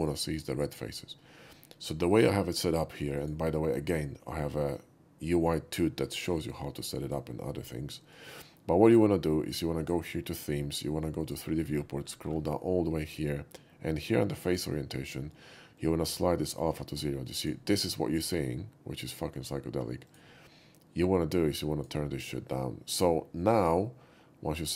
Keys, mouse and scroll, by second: 3.2 click, 7.0 click, 8.1 click, 9.8 click, 11.2 click, 12.3 middle click, 14.5 click, 15.8 click, 20.1 click, 21.1 click, 23.0 click, 24.6 click.